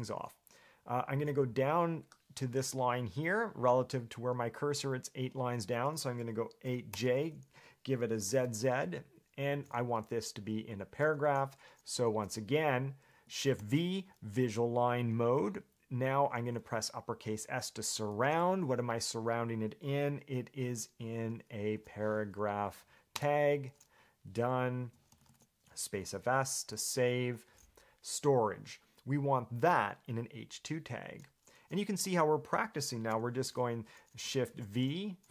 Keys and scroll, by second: 6.8 8, 7.1 j, 13.8 shift+v, 20.9 shift+s, 21.9 p, 23.3 Return, 25.0 Escape, 26.0 j, 26.2 j, 26.4 j, 26.9 j, 34.6 shift+v.